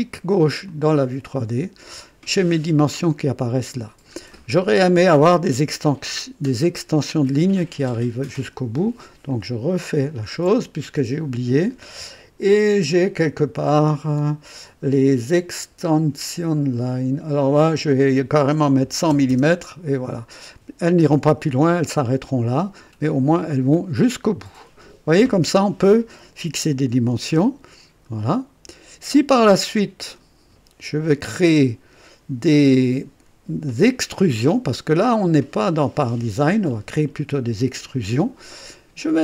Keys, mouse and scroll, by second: 0.6 click, 2.6 scroll up 1, 3.8 scroll down 1, 4.3 right click, 9.2 click, 10.1 shift+click, 12.8 scroll up 1, 13.3 scroll up 1, 14.1 scroll up 1, 17.4 click, 18.8-20.0 typing, 20.0 KP_Enter, 23.3 click, 26.9-30.3 drag, 32.4-35.1 drag.